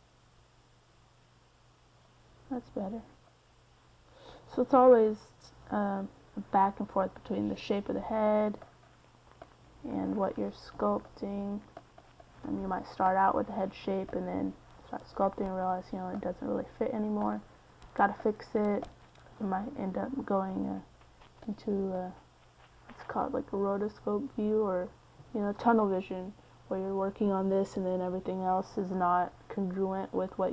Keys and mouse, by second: 2.4-4.3 drag, 4.3 c, 4.7 f, 15.9 middle click, 24.1-28.6 middle drag, 29.1 middle click, 30.0-30.5 middle drag.